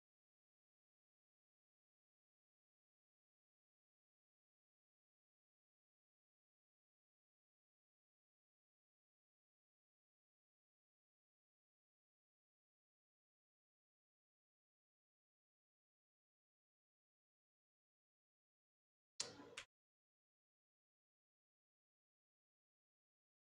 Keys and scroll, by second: 12.4 Return.